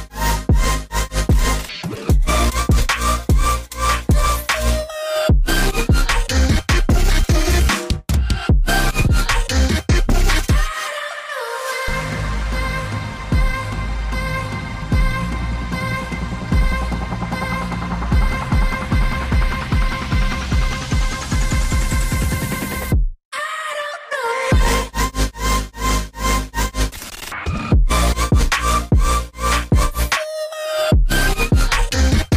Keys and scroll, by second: 4.0-5.2 typing, 6.8-7.9 typing, 10.7 Return, 25.2 Tab, 26.9 shift+Tab, 27.4 shift+Tab, 30.8 shift+Tab, 31.4-31.8 typing, 32.1 Tab.